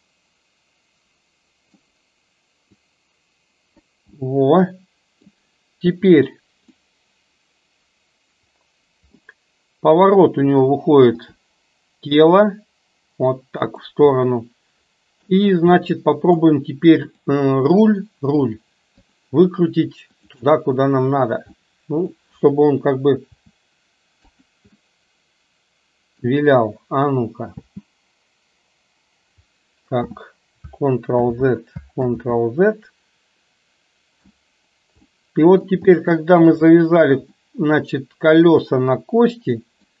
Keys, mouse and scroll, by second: 2.7-3.9 drag, 4.3-5.3 middle drag, 6.8 scroll up 1, 6.9-9.2 middle drag, 11.2 r, 14.3-15.5 middle drag, 15.8 scroll up 1, 16.1 middle click, 19.1 shift+drag, 21.6 middle click, 23.4 r, 24.8-26.3 middle drag, 27.6 space, 30.2 space, 31.2 ctrl+z, 32.1 ctrl+z, 35.2-35.8 middle drag, 36.1 shift+middle click, 37.5-40.0 middle drag.